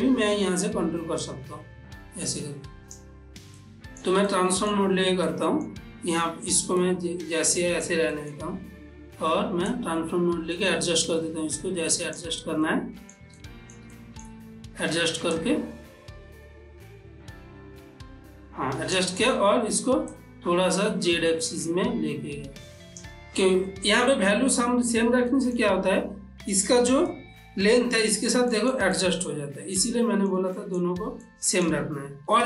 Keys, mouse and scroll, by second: 1.3-3.7 drag, 3.7 middle click, 4.4 shift+middle click, 5.3-7.6 ctrl+middle drag, 9.8-12.7 shift+drag, 12.7 ctrl+middle click, 13.4 shift+middle click, 15.4-20.2 shift+drag, 20.2-24.1 shift+drag, 25.3 shift+click, 25.4 ctrl+middle click, 29.0-32.4 ctrl+middle drag.